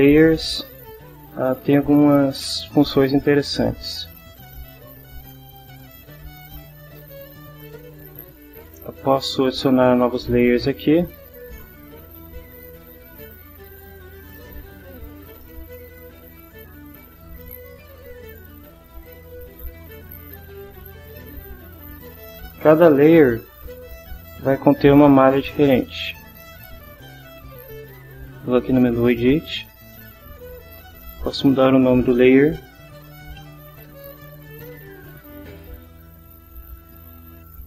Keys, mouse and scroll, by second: 9.1 click, 13.2 right click, 13.8 right click, 15.2 right click, 15.8 right click, 19.0 click, 19.5 click, 20.2 click, 20.9 click, 23.7 click, 25.3 click, 29.6 click, 31.2 click, 32.5-34.1 typing, 35.2 1.